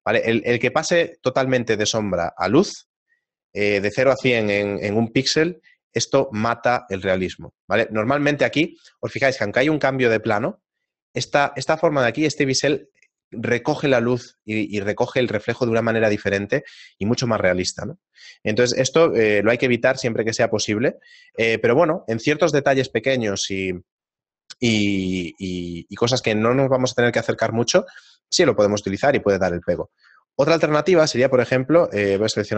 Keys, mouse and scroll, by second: 19.1 right click, 19.4 Tab, 21.3 Tab, 21.9-22.6 scroll down 3, 29.7 Tab, 30.4 ctrl+z, 30.8 ctrl+z, 32.0 a, 32.2 a.